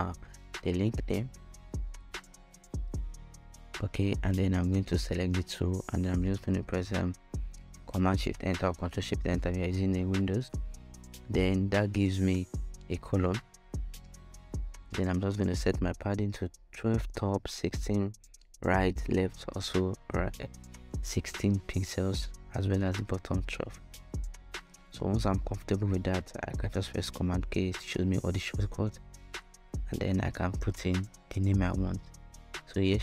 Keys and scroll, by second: 0.0-1.2 typing, 7.6 alt+super+Return, 11.1-12.1 typing, 13.5-14.4 typing, 16.6-19.2 typing, 16.7 Tab, 19.4 Return, 20.3-21.2 typing, 25.2 super+k, 27.8-33.0 typing.